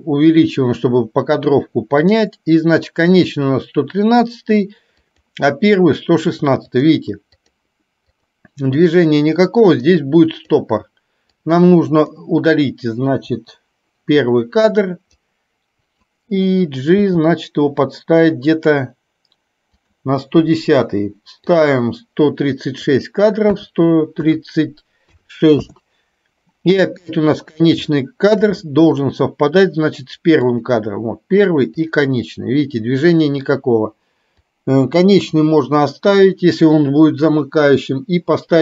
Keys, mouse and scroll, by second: 2.1 click, 5.2 click, 6.8 click, 7.6 drag, 8.2 click, 8.9-10.6 drag, 11.4-12.3 drag, 13.4 Delete, 15.3 click, 21.6 click, 23.1-25.8 drag, 28.1 shift+middle click, 30.7 click, 31.9 click, 34.6 click.